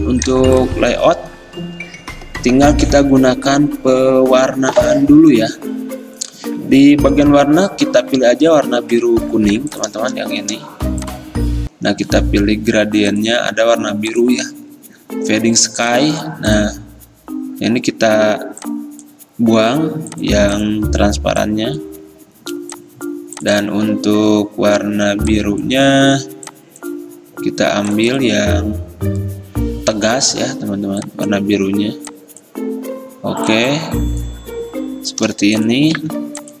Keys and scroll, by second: 36.0 g.